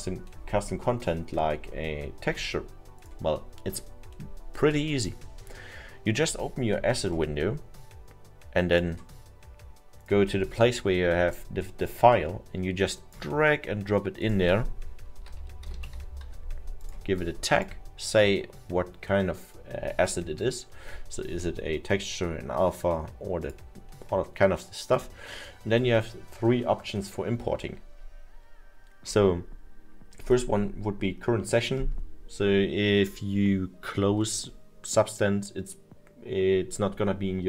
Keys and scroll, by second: 15.2 l, 15.7 v, 16.3 y.